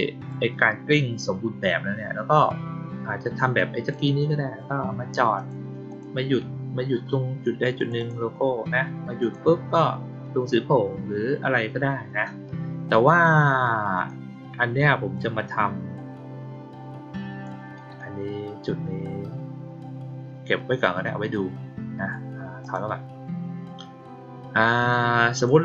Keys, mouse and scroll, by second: 3.5 click, 5.3 click, 5.8 click, 7.7 click, 7.9 click, 9.1 click, 13.9 click, 15.1-17.4 drag, 22.5 click, 24.8-25.4 drag.